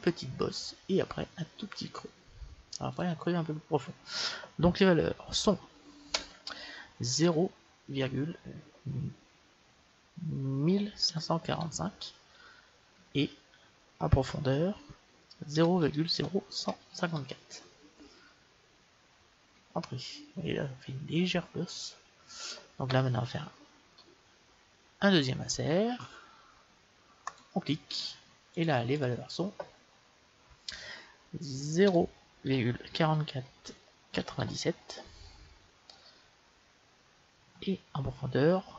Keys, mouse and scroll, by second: 2.9-4.8 drag, 25.0 i, 28.6-30.7 drag, 33.1 KP_4.